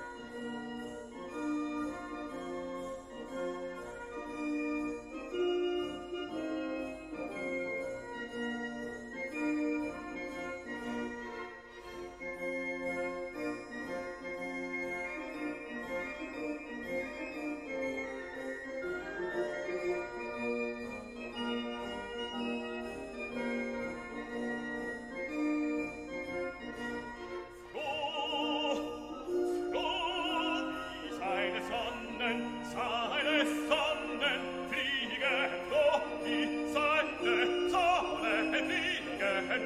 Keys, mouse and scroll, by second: 0.4 click, 3.3-3.7 scroll up 1, 4.6 Escape, 5.9-6.3 scroll down 2, 6.9 click, 10.5 click, 11.7 Escape, 15.1 click, 16.5 click, 17.8 click, 18.7 Escape, 18.9 click, 19.7 click, 21.4 click, 23.5 click, 24.4 1, 24.8 0, 26.5 click, 27.7 click, 29.3 click, 30.0 click, 30.6 click, 31.4 scroll down 1, 31.7-32.9 drag, 33.0 scroll down 1, 34.2 scroll up 1, 34.7 scroll down 1.